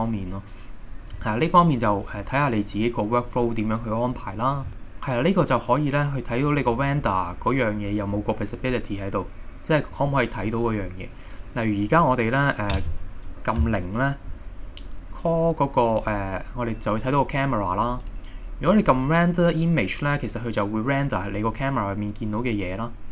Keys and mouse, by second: 2.8-4.3 middle drag, 10.5-11.0 middle drag, 13.6 KP_0, 18.2-21.1 drag.